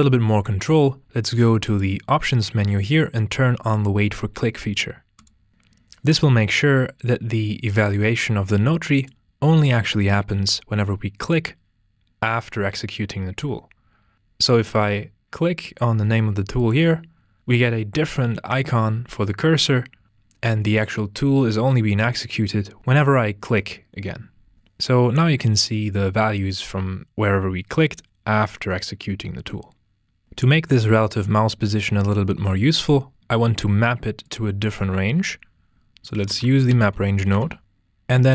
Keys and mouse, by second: 1.6-5.5 drag, 8.9-24.5 drag, 34.2 click.